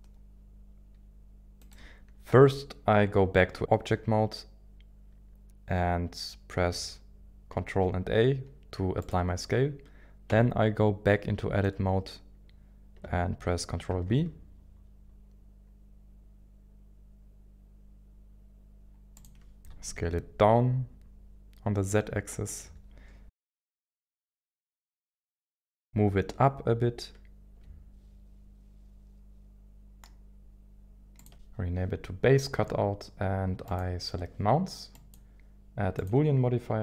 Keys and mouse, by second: 1.6 right click, 2.3 Tab, 7.6 ctrl+a, 10.3 Tab, 13.9 ctrl+b, 19.1 click, 19.6 KP_1, 19.6 s, 19.6 z, 22.4 ctrl+click, 23.7 g, 24.1 g, 24.6 z, 31.2 ctrl+shift+click, 33.6 click, 36.1-36.8 drag.